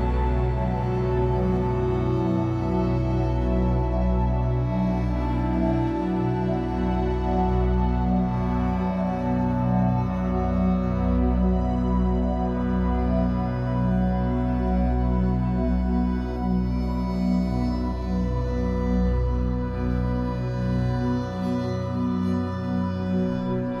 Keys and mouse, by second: 0.6 alt+click, 1.9-2.8 drag, 3.6 alt+click, 4.8 alt+click, 7.3 click, 8.1 click, 8.9 click, 10.1 click, 13.4 space, 14.9 ctrl+alt+click, 15.7 ctrl+alt+click, 17.4 /, 18.6 7, 19.6 Tab, 21.5 click, 22.8 a.